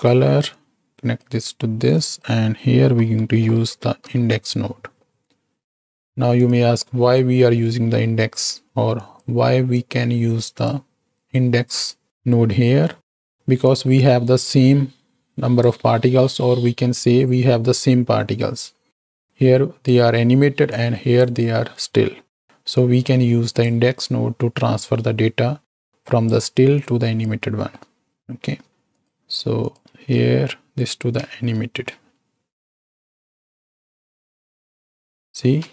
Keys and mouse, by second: 0.6-1.2 drag, 1.9-6.5 drag, 6.7 right click, 7.4-8.4 right drag, 9.1 click, 9.7-10.9 drag, 11.3 middle click, 12.9 middle click, 13.7-16.2 drag, 19.2-20.1 drag, 20.8 click, 22.7-24.0 drag, 25.9 click, 26.8-27.3 drag, 27.7 middle click, 28.9 ctrl+shift+click, 29.6 ctrl+shift+click, 31.2 space, 35.4 space.